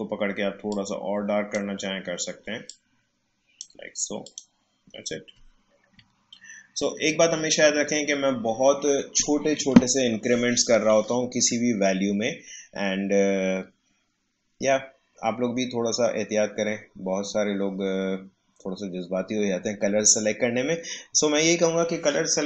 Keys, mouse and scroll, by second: 6.1 alt+scroll down 1, 6.7-7.3 alt+scroll up 1, 7.3 alt+scroll down 1.